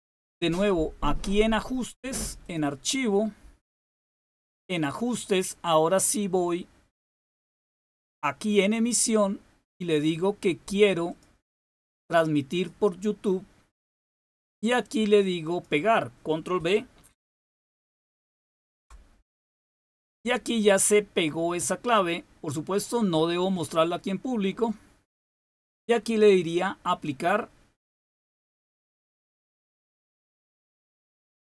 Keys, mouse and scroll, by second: 2.4 click, 4.7 click, 8.9 click, 11.0 click, 12.5 click, 15.4 click, 16.0 click, 18.2 ctrl+v, 29.5 click.